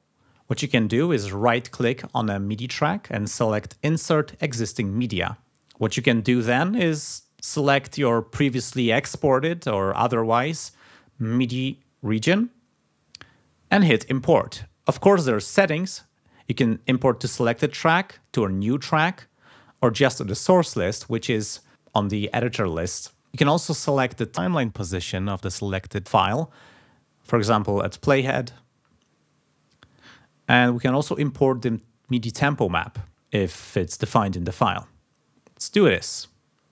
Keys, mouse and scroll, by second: 1.0 click, 1.4 right click, 4.4 click, 5.4 scroll down 2, 7.6 click, 16.8 click, 21.6 click, 25.0 click, 28.2 click, 31.5 click, 35.7 click.